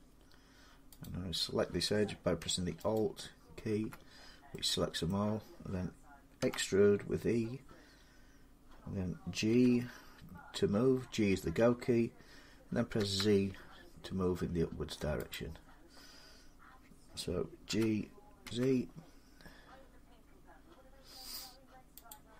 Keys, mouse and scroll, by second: 0.9 click, 2.8 alt+click, 4.9 middle click, 6.2 e, 9.3 g, 12.8 z, 15.2-20.2 drag, 17.5-18.3 typing, 21.9 click.